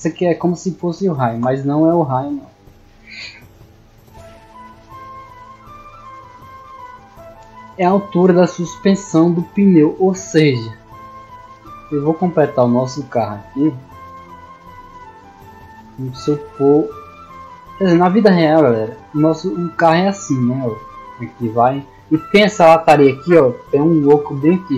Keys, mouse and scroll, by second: 14.6 d, 19.3 d, 19.9-24.7 drag.